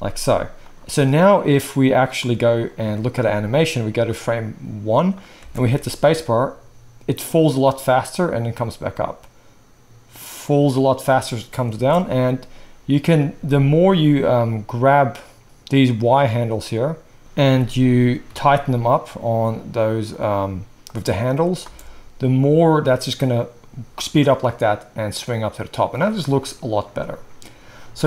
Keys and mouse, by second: 4.1-13.1 drag, 5.4 space, 11.7 space, 13.1-14.4 shift+middle drag, 14.4 click, 14.5-14.9 middle drag, 14.9 click, 15.0-16.2 middle drag, 16.2 click, 16.4-17.2 middle drag, 17.2 click, 17.4-20.8 middle drag, 17.4 g, 20.8-28.0 drag, 21.6 space.